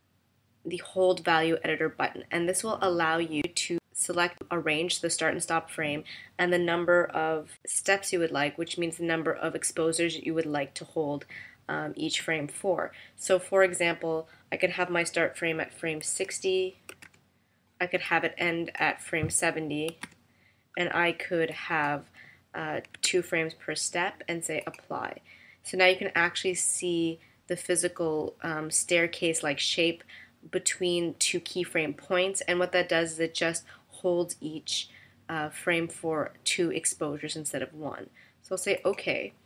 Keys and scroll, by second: 16.7-17.6 typing, 19.7-20.5 typing, 23.0 2.